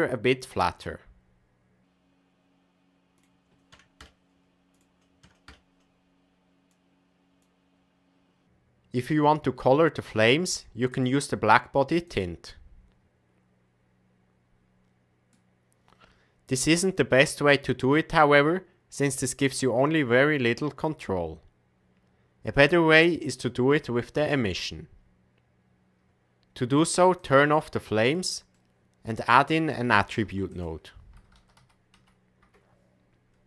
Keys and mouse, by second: 3.2-4.3 drag, 4.8-6.1 drag, 6.6 click, 10.9 click, 27.3 click, 28.5 click, 30.2 shift+a, 31.5 t.